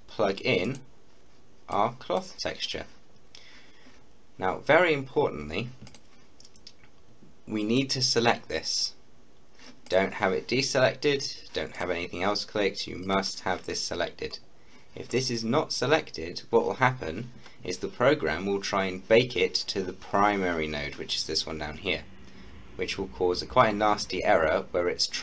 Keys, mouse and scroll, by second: 5.9 click, 9.9 click.